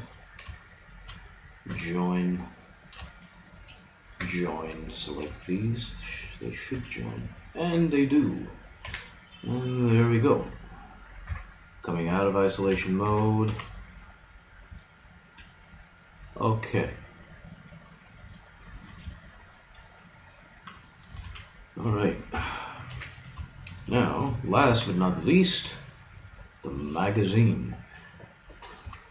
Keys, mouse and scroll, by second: 1.7 j, 4.3 j, 6.7 j, 7.5-8.9 middle drag, 8.9 a, 11.3 KP_Divide, 12.7 a, 13.1 Tab, 13.5 z, 21.3 a, 22.3 KP_3, 22.9 a, 23.9 a, 24.7 z, 28.8-29.1 middle drag, 28.9 z.